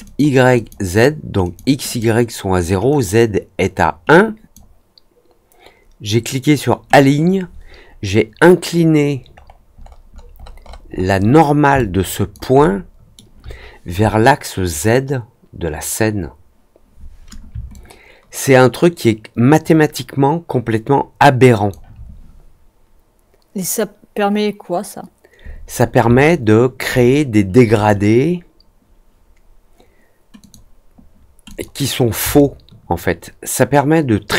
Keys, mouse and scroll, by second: 0.0 click, 0.5 click, 1.4 click, 1.8 click, 2.8 click, 4.0 click, 9.3-11.2 scroll up 7, 11.2 middle click, 11.7 alt+click, 12.5-13.1 alt+middle drag, 17.6-21.6 alt+drag, 26.2-26.7 alt+drag, 27.7 click, 30.3 click, 31.4 click, 32.3-34.3 alt+drag.